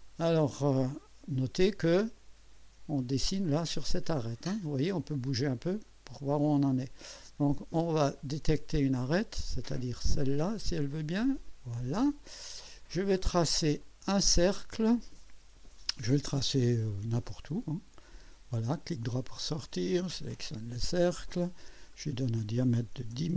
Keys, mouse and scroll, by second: 2.0 click, 5.9 click, 8.2 click, 10.9 click, 13.8 click, 17.1 click, 18.1 click, 18.8 right click, 20.3 click, 21.9 click, 22.7-23.3 typing.